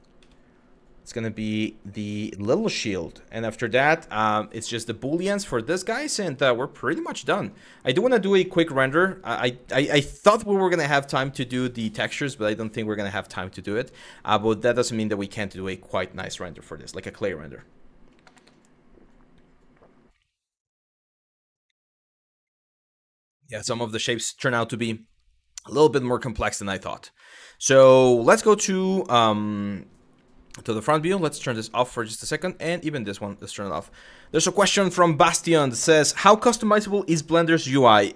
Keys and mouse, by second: 0.9 click, 2.5 middle click, 6.6 middle click, 7.0 click, 7.8 middle click, 25.4-26.4 middle drag, 26.9 middle click, 27.4 KP_1, 30.9 click, 32.9 click.